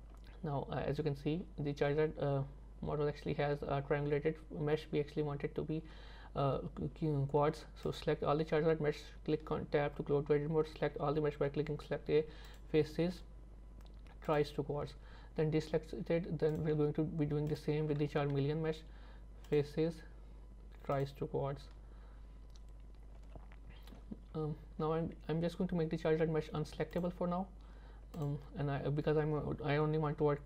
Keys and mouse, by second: 9.3 Tab, 10.7 a, 12.7-14.4 drag, 14.8 Tab, 16.5 click, 17.5 shift+click, 18.4 a, 19.7-21.1 drag, 21.7 Tab, 23.2 z, 27.0-28.3 drag.